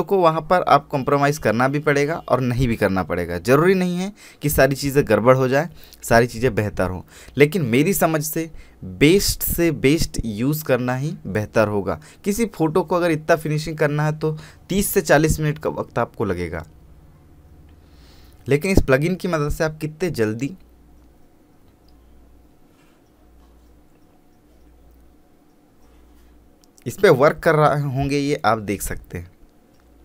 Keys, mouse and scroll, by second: 0.1-4.8 drag, 4.8-8.0 drag, 8.0-8.7 scroll down 1, 8.7-11.8 scroll up 1, 12.6-14.4 scroll down 1, 14.9 click, 19.7-20.6 scroll down 1, 20.6 click, 20.9-22.5 scroll down 1, 24.6 click, 26.2 scroll up 1, 27.7 scroll down 1, 29.8 click.